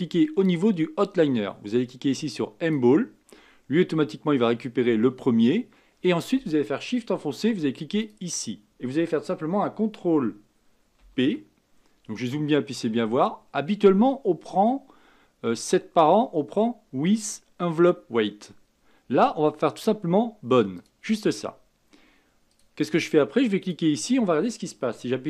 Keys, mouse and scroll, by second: 2.6 click, 8.0 shift+click, 22.5 click, 23.6 click.